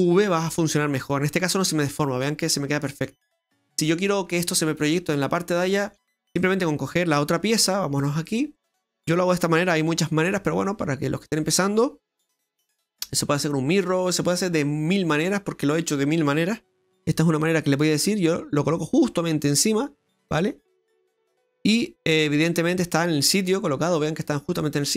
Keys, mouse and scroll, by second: 1.0 middle click, 2.6 middle click, 3.7 middle click, 5.6 middle click, 6.4 right click, 8.0 click, 8.6 right click, 9.8 g, 12.3 r, 16.8 g.